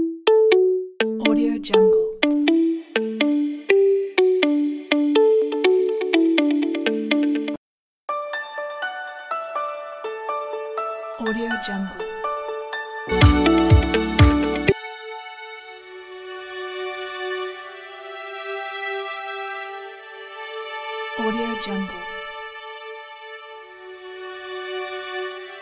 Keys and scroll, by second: 7.2 s, 12.8 s, 14.4 typing.